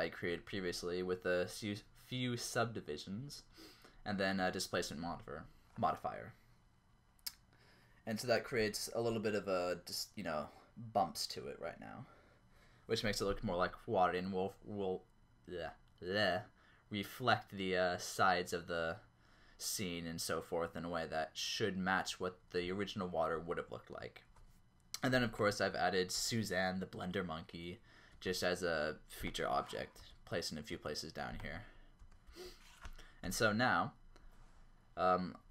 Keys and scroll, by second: 26.2 g, 28.1 ctrl+z, 30.2 g, 30.7 Escape, 32.0 g, 32.3 Escape.